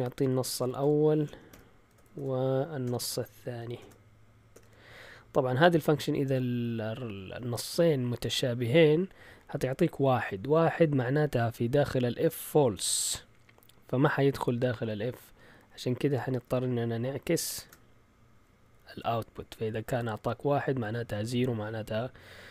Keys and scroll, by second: 0.0-5.1 typing, 10.9 Left, 11.5 Left, 11.6 typing, 17.6 typing.